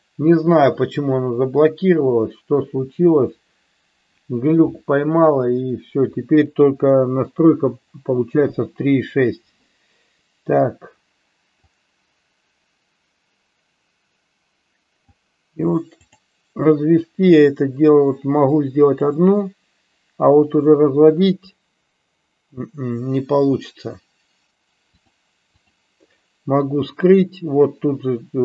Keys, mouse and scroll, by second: 11.6-15.0 drag, 17.3-18.9 drag, 24.9 click.